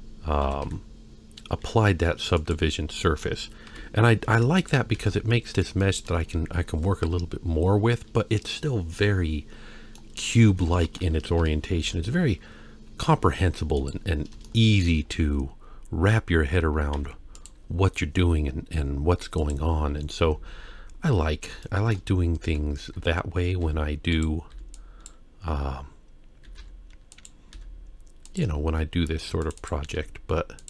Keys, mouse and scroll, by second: 0.5 s, 3.0 middle click, 3.7 KP_1, 4.3 Tab, 4.6 click, 5.0 Tab, 5.3 middle click, 5.8 shift+middle click, 7.5-8.0 scroll up 2, 9.1 middle click, 10.5 Tab, 11.4 KP_1, 11.8 shift+a, 14.4-14.9 shift+middle drag, 15.1-16.2 scroll down 3, 16.9 g, 19.4 click, 20.2 Tab, 21.7 shift+middle click, 22.1-22.4 scroll up 1, 22.5 alt+a, 23.0 z, 23.7 z, 24.5 b, 26.4 g, 27.5 s, 29.2 ctrl+r, 30.0 s.